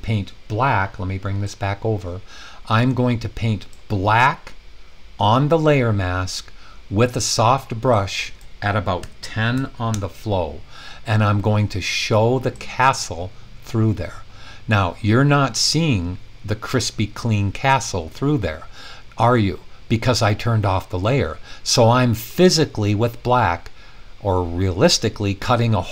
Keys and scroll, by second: 9.0-10.0 typing.